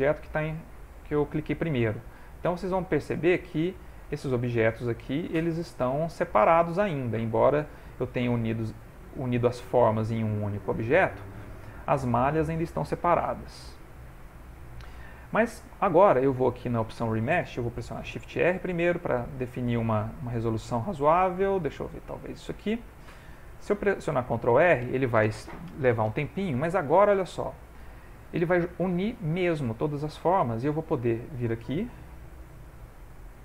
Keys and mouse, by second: 4.4 click, 7.0 click, 10.2 click, 13.4 click, 15.4 middle click, 17.8 middle click, 18.1 shift+r, 25.2 ctrl+r, 28.3 middle click, 29.7 ctrl+middle click, 30.6 middle click, 31.8 f.